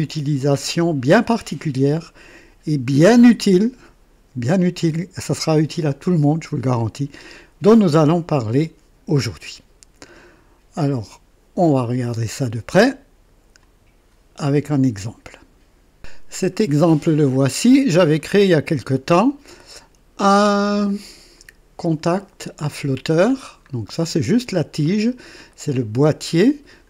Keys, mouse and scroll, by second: 10.8 click, 13.6 click, 16.0 click, 20.8-23.3 drag, 23.3 scroll down 1, 23.9-24.6 right drag, 24.9 scroll up 1, 25.5 right click, 26.7 click.